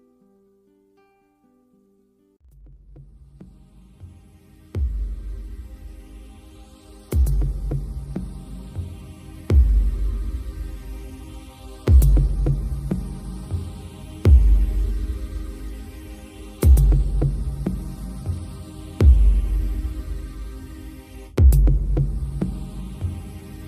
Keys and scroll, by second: 2.0 shift+Left, 2.8 shift+Right, 7.0 super+g.